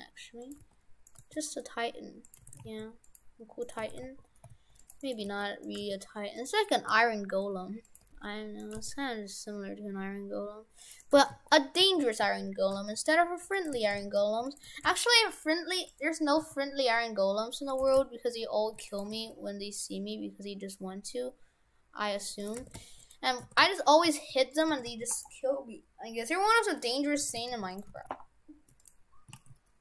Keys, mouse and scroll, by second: 0.6 g, 1.2 g, 2.5 shift+f, 3.7 right click, 3.9 shift+f, 5.1 right click, 5.3 g, 5.8 g, 7.1 s, 8.1 g, 8.8 g, 11.1 right click, 11.2 shift+f, 13.8 shift+f, 14.8 shift+f, 15.9 right click, 16.4 s, 17.9 shift+f, 19.1 g, 22.7 shift+f, 23.3 right click, 23.5 shift+f, 24.7 shift+f, 27.3 shift+f, 27.9 shift+f, 29.4 shift+a.